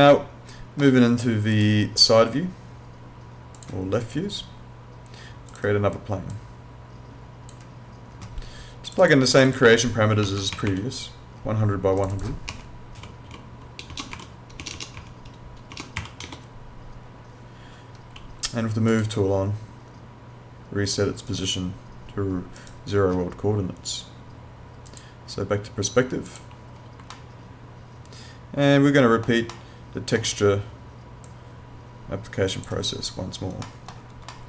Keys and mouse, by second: 1.5 click, 9.0 click, 10.2 1, 10.5 0, 12.0 click, 12.5-14.6 typing, 15.7 BackSpace, 16.0 0, 18.9 click, 21.3 right click, 24.9 click, 27.1 alt+middle click, 31.3 click, 33.6 middle click.